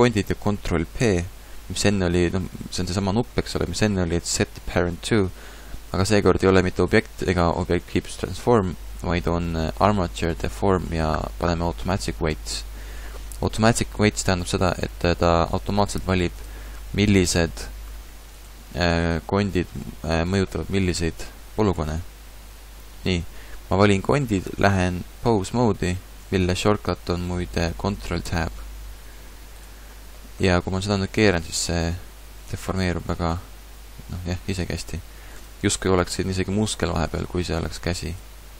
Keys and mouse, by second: 1.0 ctrl+p, 18.4-20.5 drag, 20.5-23.8 middle drag, 28.3 ctrl+Tab, 29.6-31.4 right drag, 30.7 r, 33.2 r, 34.5 click, 35.5-37.0 drag, 37.0 middle click, 37.6-38.5 right drag, 38.4 r.